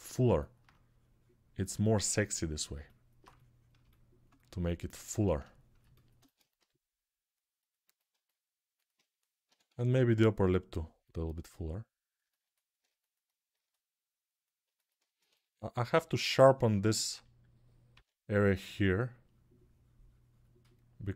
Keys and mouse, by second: 6.3 g, 8.2-9.3 alt+drag, 9.2 p, 9.4 [, 9.6 [, 14.6-21.1 alt+shift+drag, 17.7 p.